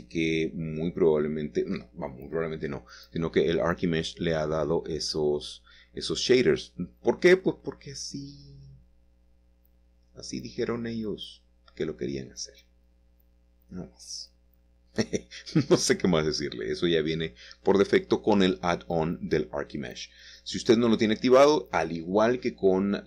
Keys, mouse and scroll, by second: 0.0-0.8 scroll down 1, 1.4 shift+click, 3.1 shift+middle click, 4.0 shift+click, 4.3 shift+click, 5.5 shift+middle click, 6.3 shift+click, 6.8-9.1 middle drag, 9.2 shift+click, 10.3 shift+click, 12.5 ctrl+z, 13.4 shift+click, 14.3 ctrl+z, 14.6-15.3 scroll down 1, 17.2 shift+middle click, 18.3 shift+click, 19.0 ctrl+z, 19.5 shift+click, 20.3 ctrl+z, 20.8 shift+click, 22.7-23.0 scroll up 1.